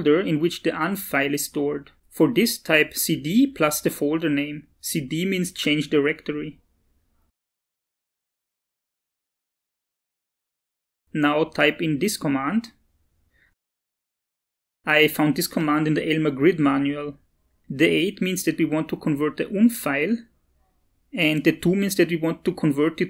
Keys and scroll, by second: 2.4-3.2 typing, 3.4 ctrl+v, 4.8 Return, 12.6-15.2 typing.